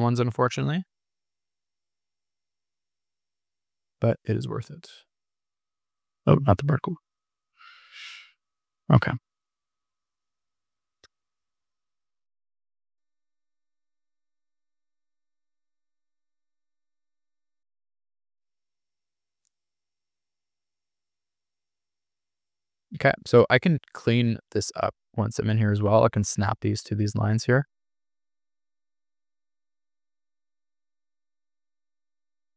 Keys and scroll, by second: 6.3 super+z, 9.9 super+-, 12.6 super+-, 13.0 super+=, 15.0 BackSpace, 15.6 super+-, 20.9 super+=, 32.1 super+z.